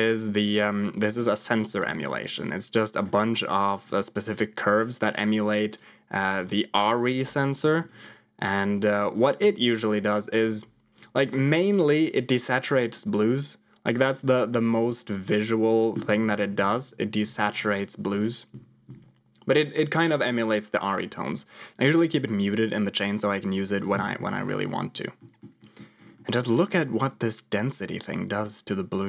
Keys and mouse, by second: 2.0 middle click, 4.1 click, 4.7 click, 7.5 middle click, 8.0 click, 10.9 click, 11.9 click, 12.8 click, 15.4 click, 16.1-18.9 typing, 21.7 m, 23.7 click, 23.9 m, 25.1 middle click, 25.5 middle click, 26.1 middle click, 27.0-29.0 drag.